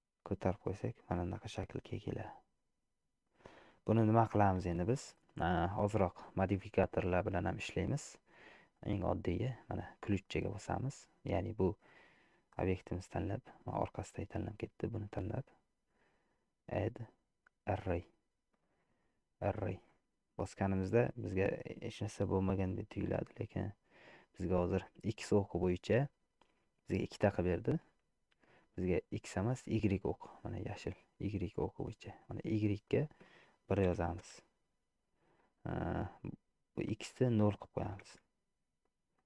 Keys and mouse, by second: 0.5-1.8 middle drag, 1.4 Tab, 2.0-3.4 middle drag, 11.7 click, 16.7-18.1 drag, 20.0 middle click, 21.4 shift+middle click, 23.4-24.7 middle drag, 27.4 middle click, 32.9-35.2 drag, 36.9-38.7 drag.